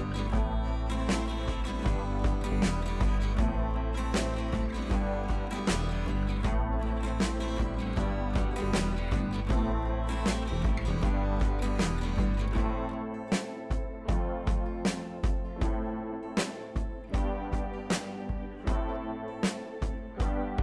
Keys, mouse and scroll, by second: 4.5-5.6 scroll down 1, 6.7-7.0 scroll down 2, 9.3-10.3 scroll down 1, 12.3-14.1 scroll down 1, 16.3 click, 18.6-19.3 alt+drag.